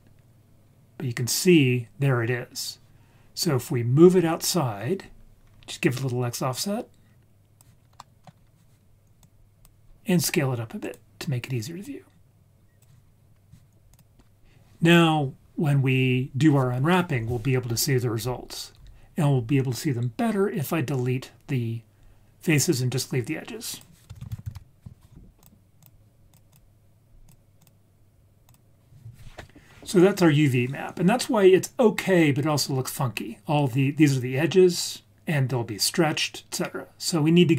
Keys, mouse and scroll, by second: 0.0-0.4 scroll down 2, 0.6-1.3 scroll down 2, 1.3-2.2 scroll up 3, 5.4-6.4 scroll up 3, 6.5-7.6 drag, 7.7 scroll down 1, 8.0 middle click, 8.4-8.7 scroll down 1, 8.7-9.1 scroll up 1, 9.2-10.8 drag, 11.8-12.8 drag, 13.0-13.4 scroll down 2, 13.3 scroll up 1, 13.9 click, 23.7 click, 24.1 shift+a, 26.3-27.3 drag, 27.6-28.5 drag.